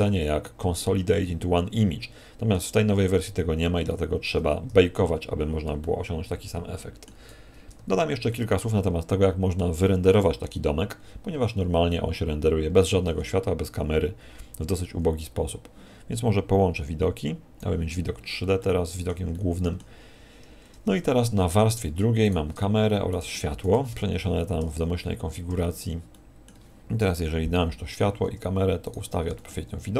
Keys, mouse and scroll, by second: 1.1 middle click, 3.7 KP_1, 5.8 shift+middle click, 7.7 Tab, 8.3 middle click, 12.7 Escape, 12.7-13.2 scroll up 10, 13.2-13.8 scroll down 5, 17.1 click, 18.1 scroll up 4, 18.5 middle click, 19.3 middle click, 20.2 scroll down 5, 21.3 2, 22.2 right click, 23.1 shift+right click, 23.9 m, 25.5 1, 26.1 middle click, 27.0 KP_0, 28.8 right click, 29.3 g.